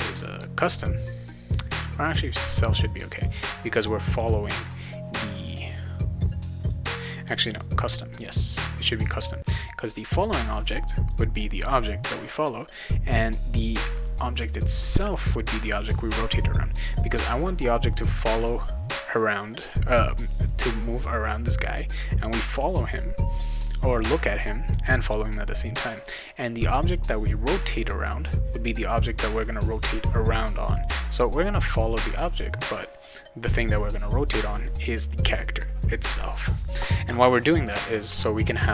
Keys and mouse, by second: 0.1 click, 1.7 click, 2.2 click, 6.6 click, 7.5 click, 9.8-11.1 drag, 13.9-15.1 drag, 37.4-38.7 right drag, 37.4-38.7 typing.